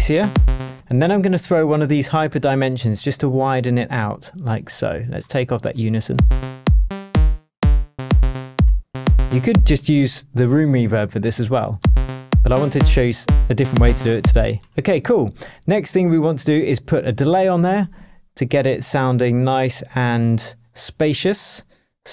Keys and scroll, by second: 14.6 space, 19.3 Up, 19.6 Down.